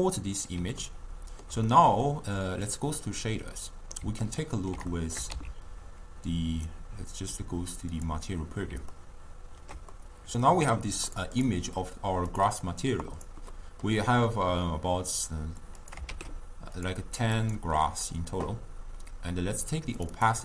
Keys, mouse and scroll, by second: 0.8-2.7 ctrl+middle drag, 2.7 click, 3.6-8.3 middle drag, 8.3 z, 8.9-11.2 ctrl+middle drag, 11.2 click, 11.4 click, 12.6-15.9 drag, 16.1 shift+d.